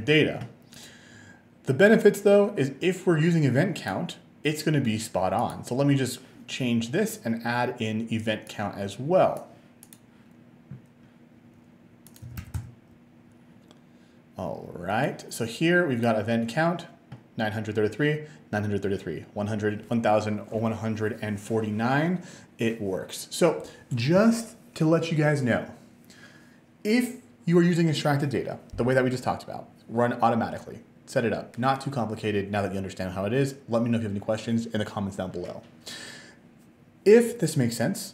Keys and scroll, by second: 12.1-13.1 typing.